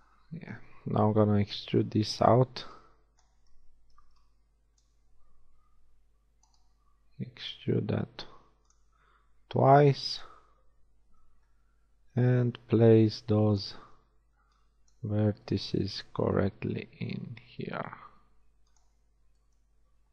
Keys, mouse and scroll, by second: 0.3-1.6 drag, 1.6 a, 1.8 a, 2.6 b, 2.8-4.6 drag, 3.9 b, 5.8 r, 6.9 e, 8.8 e, 11.4 g, 13.9 a, 14.4 b, 15.4 b, 16.4 g, 19.0 b.